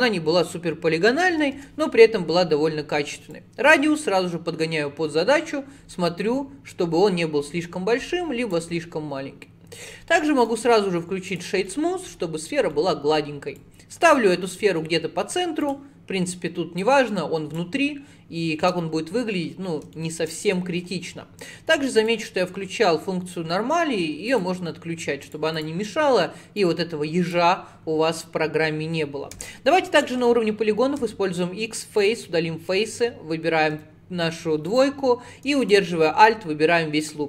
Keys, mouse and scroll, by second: 3.4-6.4 drag, 10.4-11.7 right drag, 11.7 middle click, 12.2-12.6 scroll down 6, 12.7 middle click, 13.6 click, 14.2-15.7 middle drag, 15.7 click, 16.8 click, 18.7 Tab, 19.5 scroll up 4, 20.0 shift+middle click, 20.5-21.9 scroll up 1, 22.0-25.1 drag, 26.6 click, 29.4 3, 29.5 click, 30.3 x, 31.1 x, 33.8 3, 34.7 click, 35.7 alt+click.